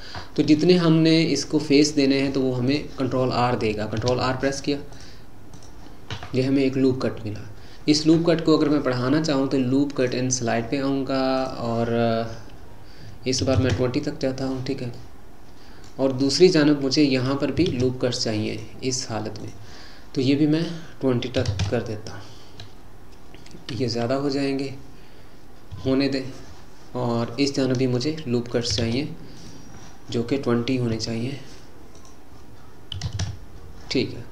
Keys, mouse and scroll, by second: 2.7 click, 4.0 ctrl+r, 10.1-14.5 drag, 14.9-17.2 middle drag, 17.2 click, 17.7 ctrl+r, 20.6-23.7 drag, 23.9 Escape, 25.7 KP_Enter, 28.5 click, 28.8 ctrl+r, 31.9-34.3 drag.